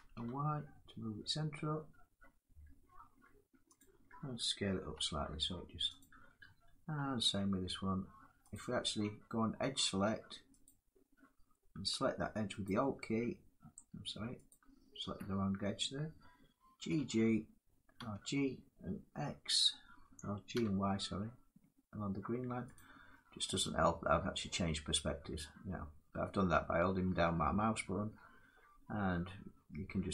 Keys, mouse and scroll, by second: 3.5 click, 4.9 s, 5.7 click, 8.2 click, 10.3 click, 12.3 alt+click, 14.2 click, 16.5 g, 17.7 g, 20.2 y, 22.4 click, 23.4-27.5 drag.